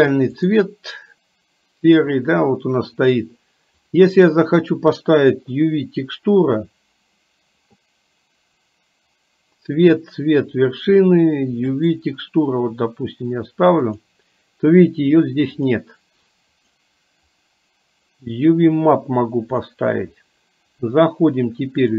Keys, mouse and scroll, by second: 4.1-12.1 drag, 14.0-16.7 drag, 17.4-19.6 drag.